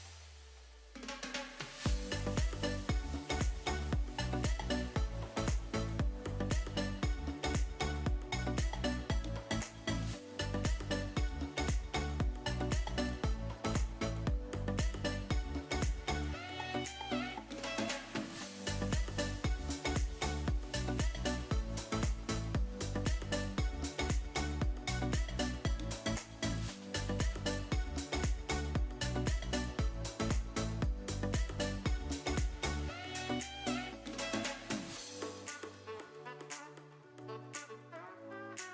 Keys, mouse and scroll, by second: 0.5 click, 0.8 r, 1.4 drag, 2.0 g, 3.0 click, 3.2 r, 4.3 drag, 5.0 click, 5.8 l, 6.5 r, 8.3 ctrl+click, 9.0 g, 16.2 click, 17.6 g, 18.4 click, 18.8 g, 19.5 click, 20.9 s, 21.4 y, 22.3 click, 22.8 g, 23.0 z, 25.2 ctrl+click, 27.0 s, 27.4 y, 28.6 click, 29.5-30.1 shift+middle drag, 32.3 ctrl+space, 34.8 middle click, 37.5 click.